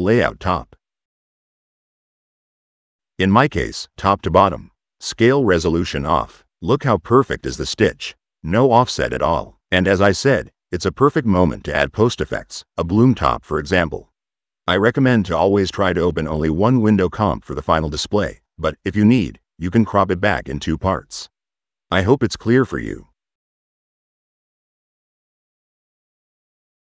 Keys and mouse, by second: 0.1 drag, 0.7-1.1 drag, 1.4-1.9 drag, 1.9 right click, 3.3 click, 3.8 click, 5.2 click, 6.4 click, 7.8 click, 9.5 right click, 10.7 o, 12.2 drag, 12.4-13.4 typing, 13.4 click, 13.9 click, 14.4 click, 14.7-15.0 drag, 15.2 click, 15.7 click, 16.2 click, 17.0 click, 17.5 r, 17.9 click, 18.5 click, 19.0 click, 19.3 click, 19.8 click, 20.0 click, 20.7 n, 21.8 click, 21.9 c, 22.0 click, 24.8-25.4 drag, 26.4 click.